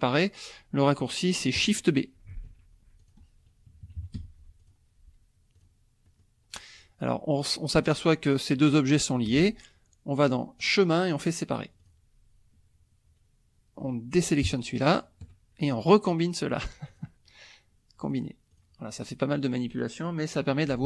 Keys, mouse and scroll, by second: 2.3 shift+b, 3.0 shift+click, 3.7 KP_Subtract, 4.2 F1, 4.6 click, 5.5 click, 6.0 click, 10.6 click, 11.8 click, 14.6 shift+click, 16.9 click, 18.0 click, 18.5 click.